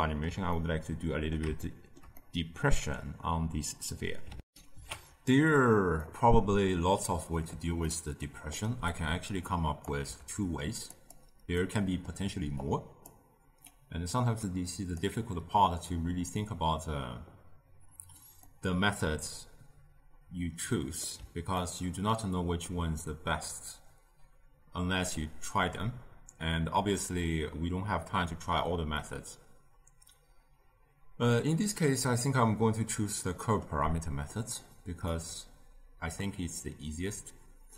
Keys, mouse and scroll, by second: 4.4 ctrl+alt+shift+q, 5.9-8.8 middle drag, 8.8 click, 9.9 g, 11.5-12.5 middle drag, 12.5 click, 13.6 click, 18.3-21.4 middle drag, 21.5-25.9 ctrl+middle drag, 28.9-37.7 middle drag.